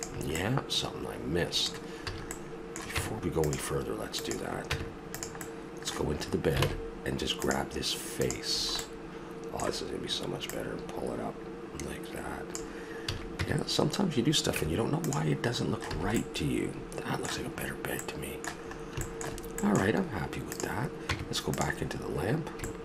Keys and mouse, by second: 0.3-1.4 middle drag, 2.1 a, 3.0 Tab, 4.7 Tab, 6.1 middle click, 6.6 ctrl+Tab, 8.2 right click, 8.5 middle click, 8.6 middle click, 9.0 middle click, 9.2 middle click, 10.7 middle click, 13.1 a, 13.4 Tab, 14.6 Tab, 15.4-16.3 middle drag, 15.9 a, 16.8-18.0 middle drag, 18.7-19.3 middle drag, 19.6-20.5 middle drag, 20.5-21.0 right drag, 21.0 Tab, 21.0-21.8 drag, 21.8 middle click, 22.0 click.